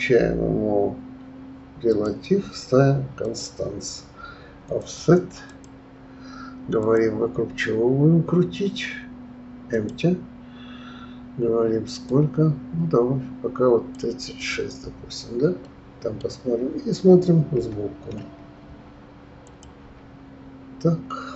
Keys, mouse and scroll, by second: 1.9 click, 3.2 click, 4.8 click, 5.5 click, 6.8-9.8 drag, 12.1-16.5 drag, 16.5 middle click, 17.6 KP_1, 19.4 click, 19.8 KP_1.